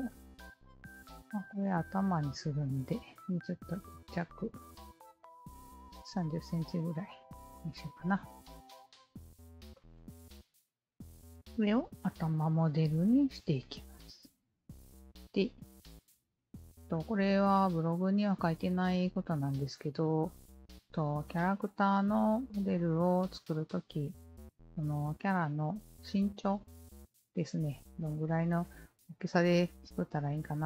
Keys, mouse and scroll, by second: 0.2-1.2 alt+drag, 2.8 KP_Decimal, 3.6 KP_3, 4.2 Return, 5.7-6.3 alt+drag, 7.2 alt+middle click, 7.6-7.9 alt+drag, 7.6 alt+right click, 8.4-9.5 alt+drag, 9.7 alt+click, 10.1 alt+middle drag, 10.4 alt+drag, 10.9 alt+right drag, 11.1-12.0 alt+drag, 12.2 alt+middle drag, 12.6-14.7 alt+drag, 15.1-15.5 alt+drag, 18.1-18.7 alt+drag, 19.4 alt+click, 23.4 alt+click, 25.1-25.9 alt+drag, 26.7 alt+click, 29.9 alt+click.